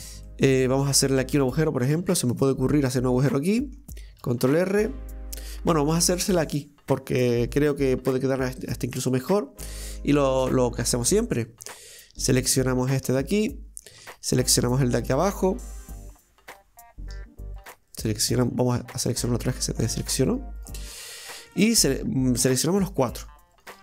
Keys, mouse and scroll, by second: 0.3-2.0 middle drag, 2.0 ctrl+r, 3.3 middle click, 4.2 ctrl+r, 9.7-10.9 middle drag, 10.9 click, 11.9 right click, 12.3 shift+right click, 12.6 shift+right click, 12.9 shift+right click, 13.2-14.5 middle drag, 14.5 shift+right click, 15.0 shift+right click, 15.4 shift+right click, 16.4 shift+right click, 17.6 right click, 17.9 right click, 18.4 shift+right click, 18.7 shift+right click, 19.1 shift+right click, 19.4 middle click, 20.3 shift+right click, 20.6 shift+right click, 20.9 shift+right click, 21.2 shift+right click, 21.5 middle click, 22.5 shift+right click, 22.8 shift+right click, 23.1 shift+right click, 23.6 shift+right click.